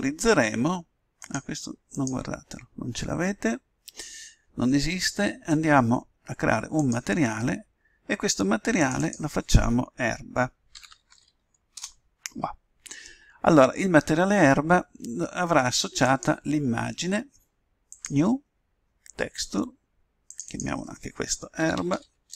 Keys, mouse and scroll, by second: 1.2-3.7 drag, 6.8-8.4 drag, 8.8-10.7 drag, 16.0-17.6 drag, 18.0-19.6 drag, 20.3-22.3 drag.